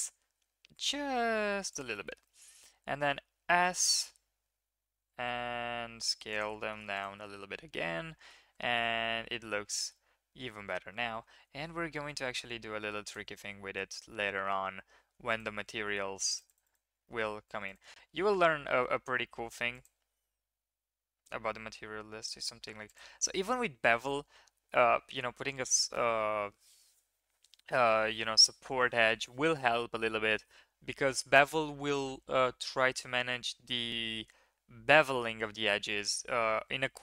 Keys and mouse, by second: 2.1 shift+click, 2.4 click, 3.0 s, 7.1 Tab, 7.7-8.3 drag, 8.5 ctrl+s, 10.5 drag, 11.3 ctrl+s, 12.1-12.9 drag, 13.7 Tab, 14.1-14.4 drag, 15.3 click, 16.3 shift+drag, 17.0 drag, 18.2 click, 18.6 drag, 19.2 ctrl+r, 23.0 Tab.